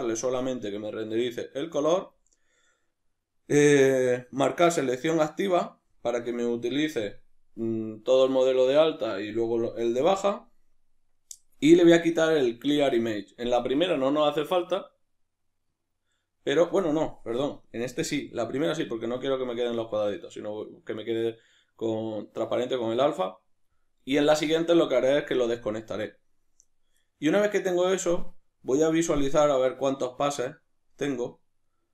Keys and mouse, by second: 18.0 click, 27.1-31.9 middle drag.